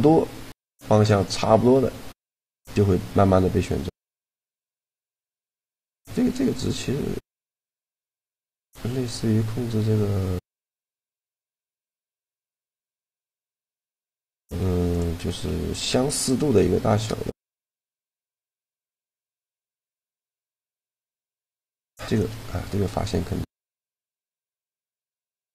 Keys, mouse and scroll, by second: 4.3 middle click, 5.7-7.6 drag, 12.9-14.2 middle drag, 14.3 Tab, 14.7-16.5 middle drag, 15.0 Tab, 19.7-21.5 right drag, 20.8 shift+g, 24.2-25.5 middle drag.